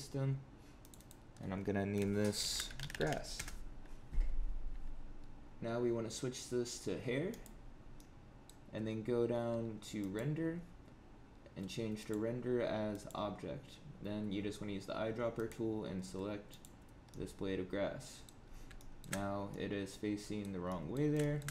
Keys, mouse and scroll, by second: 0.7 click, 0.9 click, 2.9 s, 7.2 click, 7.9 middle click, 9.9 click, 11.9 click, 15.3 click, 17.0 middle click, 18.4 scroll up 4, 18.7 shift+middle click, 19.1 scroll down 2, 19.4 middle click, 20.6 middle click, 20.8 shift+middle click, 21.1 shift+middle click, 21.4 scroll down 2.